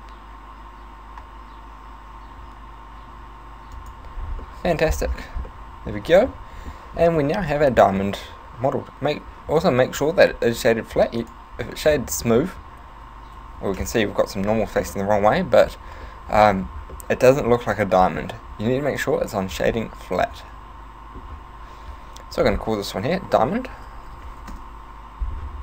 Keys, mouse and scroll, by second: 3.9 click, 4.5 middle click, 5.1-5.5 scroll down 5, 5.3 z, 5.5 middle click, 6.0 Tab, 6.3 middle click, 7.2 middle click, 11.3 click, 12.0 middle click, 12.4-12.8 scroll up 2, 12.9 Tab, 13.4 a, 13.6 a, 14.2 ctrl+n, 14.9 middle click, 15.4 middle click, 15.9 Tab, 16.1 middle click, 17.0 middle click, 17.9 middle click, 19.0 click, 19.9 middle click, 22.4 click.